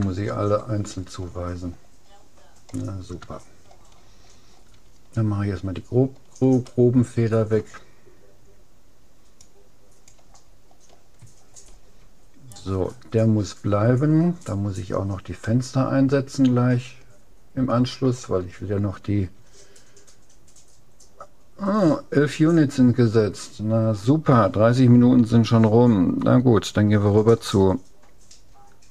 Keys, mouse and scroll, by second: 0.1-2.9 middle drag, 3.3 middle click, 4.5 middle click, 6.7-8.5 middle drag, 9.5-11.1 drag, 10.7 middle click, 12.5-13.7 middle drag, 13.7-14.5 scroll up 1, 15.5-17.3 middle drag.